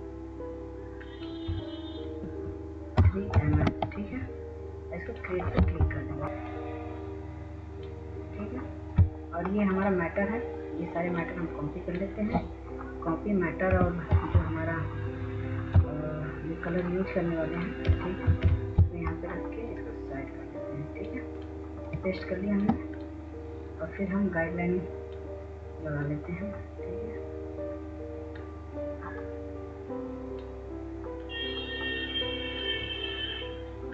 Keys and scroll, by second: 3.0-3.3 typing, 3.6 Tab, 5.5-6.3 typing, 13.9 ctrl+c, 18.1 ctrl+v.